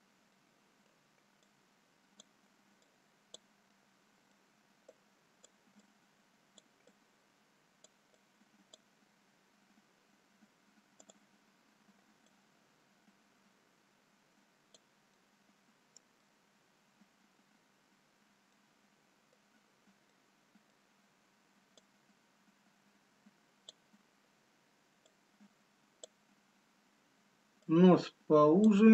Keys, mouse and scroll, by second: 0.4 middle click, 1.7 click, 3.1 click, 3.7 middle click, 5.4 click, 6.2 click, 6.9 click, 9.7-11.0 scroll down 4, 11.2 click, 12.4 click, 15.2 middle click, 16.9-17.3 scroll up 2, 18.2 scroll up 2, 19.1 middle click, 19.7-20.1 scroll up 1, 20.7 middle click, 21.8 click, 25.8 scroll up 1, 28.3 click.